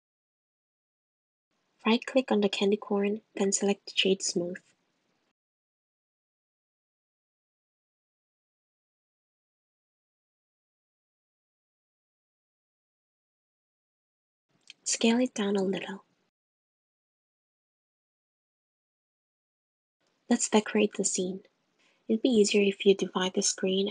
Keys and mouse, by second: 0.5 click, 1.8 Tab, 3.1 click, 3.6 right click, 10.7-12.0 drag, 13.2 click, 14.3 click, 14.7 s, 15.8 Tab, 17.9 g, 23.6-23.9 drag.